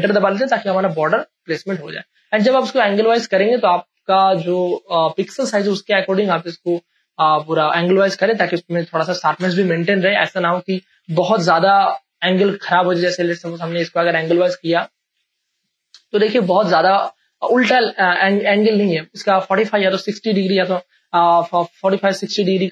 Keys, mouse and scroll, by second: 0.8 space, 1.1-6.3 drag, 6.3 ctrl+t, 8.5 ctrl+space, 8.6 ctrl+click, 9.3 Return, 10.8 space, 11.2 ctrl+click, 13.1 ctrl+alt+z, 14.3 ctrl+t, 15.8 click, 16.7 ctrl+alt+z, 17.7 ctrl+t, 18.6 ctrl+shift+click, 20.1 space, 20.3-22.3 ctrl+drag, 22.3-22.7 drag.